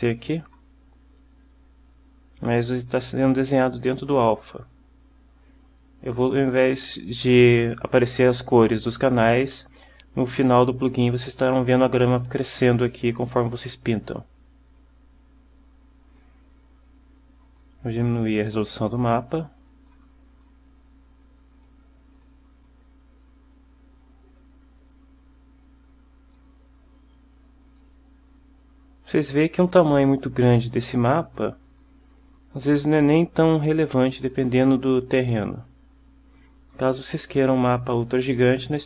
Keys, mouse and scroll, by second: 3.0-4.7 drag, 16.2 click, 17.6 click, 19.6-20.7 drag, 21.6 click, 22.2 click, 22.8-26.7 drag, 27.8 click, 29.8 click, 30.6 click, 31.2-31.7 drag, 31.8 click, 32.4 click, 32.9 click, 33.8 click, 34.4 click, 36.7 click.